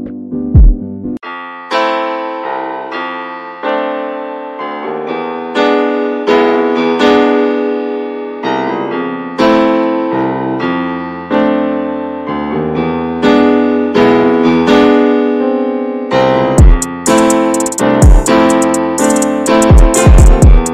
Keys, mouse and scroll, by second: 0.2 alt+z, 0.6 middle click, 1.1 Tab, 1.3-1.8 drag, 1.8-2.6 middle drag, 2.6 scroll up 1, 2.9-3.2 shift+middle drag, 3.2 scroll up 1, 3.5-4.2 middle drag, 4.2-4.7 drag, 4.7-7.6 middle drag, 7.7 ctrl+s, 11.0 right click, 11.4 drag, 11.6 scroll down 2, 11.9-12.4 middle drag, 12.4 ctrl+s, 12.6 drag, 13.3-14.3 middle drag, 14.3 ctrl+s, 14.7-15.4 shift+middle drag, 15.4 ctrl+s, 17.2 drag, 18.2-20.4 shift+middle drag, 20.4 click, 20.6 Tab.